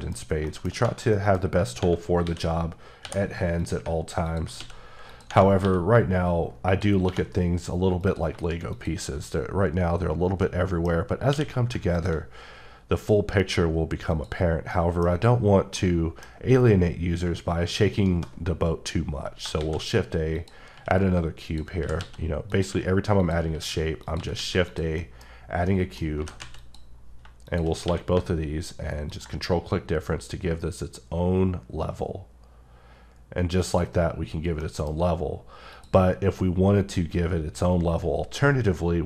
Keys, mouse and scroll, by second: 0.2 scroll down 1, 0.5 middle click, 1.1 middle click, 1.6 scroll up 1, 2.2-3.0 typing, 3.6 click, 4.6 x, 5.1 click, 5.6 q, 6.7 click, 7.0 2, 8.0 click, 8.7 shift+click, 10.0-10.4 scroll down 1, 10.4 middle click, 11.0 scroll up 1, 11.3 q, 11.9 click, 14.5 scroll down 1, 14.7 middle click, 15.5 scroll down 1, 15.7 middle click, 16.4-17.2 scroll up 3, 18.0 shift+right click, 19.6 a, 20.4 click, 20.7 s, 21.5 click, 21.8-24.4 typing, 22.5 click, 23.2 click, 24.0 click, 24.7 click, 25.0 middle click, 25.6 scroll up 1, 25.7 middle click, 26.2 g, 26.4 z, 26.6 click, 26.9-27.2 scroll down 3, 27.5 shift+click, 27.8 q, 29.1 ctrl+click, 33.6 click, 34.2-34.6 scroll down 2, 34.6 middle click, 35.0 scroll up 2, 35.7 click, 37.7-39.0 scroll up 1.